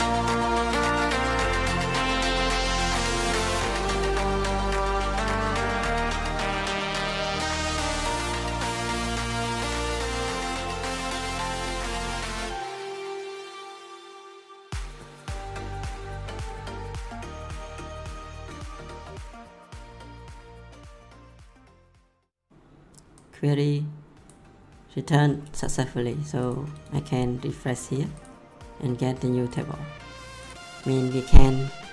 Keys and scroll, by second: 0.0-2.4 typing, 3.8 BackSpace, 4.0 ctrl+v, 11.2 BackSpace, 12.5 Delete, 15.6 ctrl+c, 16.3 ctrl+v, 19.9 ctrl+c.